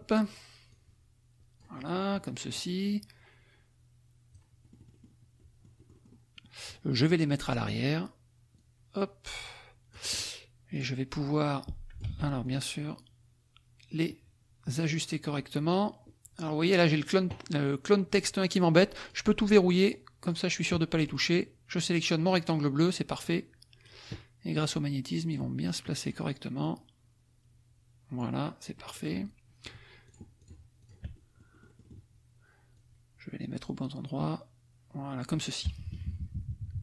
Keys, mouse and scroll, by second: 0.6-2.3 drag, 2.5-5.2 drag, 5.4 click, 7.6 click, 8.5-10.3 drag, 10.7 click, 11.2 click, 12.0 ctrl+z, 12.5 ctrl+click, 13.0-14.2 drag, 14.7 click, 19.0 click, 19.4 click, 19.8 click, 20.2 click, 21.1 click, 23.2 click, 24.6 click, 26.1 click, 26.6-28.3 drag, 28.7 click, 30.0 shift+click, 30.5 shift+click, 30.8 shift+click, 31.1 shift+click, 32.7-35.5 drag, 35.7 KP_Subtract.